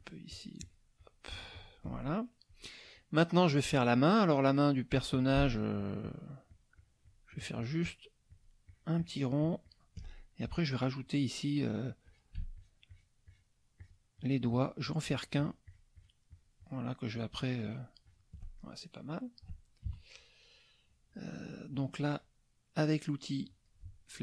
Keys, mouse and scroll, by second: 0.3 shift+click, 2.1 shift+middle click, 2.7 shift+middle click, 5.1 shift+click, 5.5 shift+click, 8.3 shift+click, 10.1 shift+middle click, 12.0 click, 12.5 shift+click, 13.8 shift+click, 14.2 shift+click, 17.7 shift+click, 18.1 shift+click, 18.6 shift+middle click, 19.9 KP_Subtract, 20.5 click, 23.5 click.